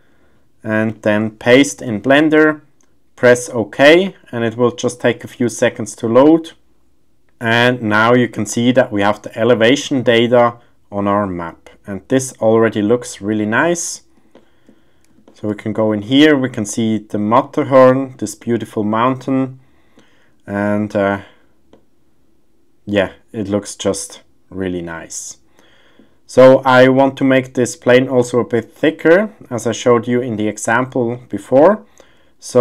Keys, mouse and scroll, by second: 0.0-7.4 drag, 7.4-13.6 middle drag, 14.3 shift+middle click, 15.2 shift+middle click, 16.0-16.4 middle drag, 17.4-17.9 middle drag, 18.4-19.9 middle drag, 20.6-21.0 shift+middle drag, 21.7-26.0 middle drag, 26.5 shift+middle drag, 28.9-29.3 middle drag, 30.1-30.4 shift+middle drag, 30.2 shift+scroll, 31.1 shift+middle click, 31.1 shift+scroll, 31.6-32.6 middle drag.